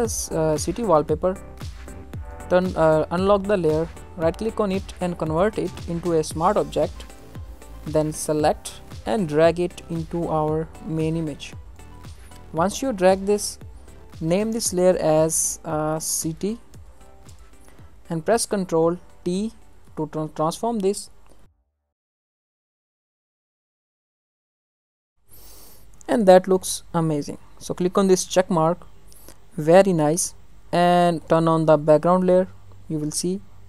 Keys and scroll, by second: 17.2 Return, 19.1 ctrl+t, 23.3 ctrl+t.